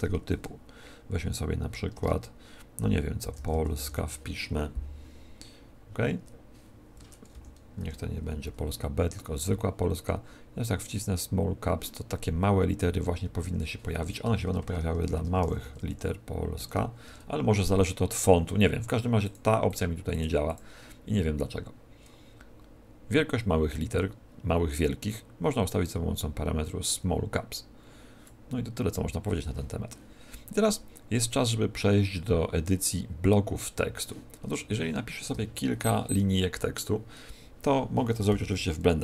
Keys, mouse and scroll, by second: 1.9 BackSpace, 3.1-3.7 typing, 5.1-5.5 scroll down 5, 6.1 Tab, 7.0 Tab, 7.3 Delete, 7.7 Tab, 10.7 click, 13.4 Tab, 14.2-16.5 typing, 17.0 Tab, 19.2 click, 19.6 click, 20.4 click, 25.5 click, 30.3-31.9 scroll down 3, 32.1 scroll down 3, 34.4 Tab, 35.3-36.2 BackSpace, 38.5 shift+p, 38.9 shift+k.